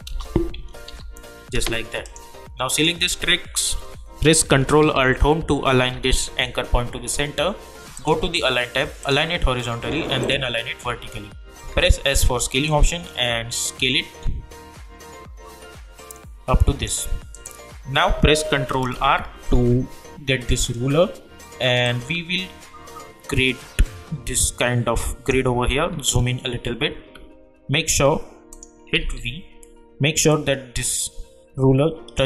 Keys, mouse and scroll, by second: 0.1 Return, 0.8 ctrl+v, 2.0 click, 5.4 click, 5.6 ctrl+alt+Home, 7.9 click, 11.6 s, 12.9-17.0 drag, 18.9 ctrl+r, 21.8-25.2 drag, 25.2 -, 25.8-27.2 alt+scroll up 1, 28.5 click, 29.0 v, 30.3-32.2 drag.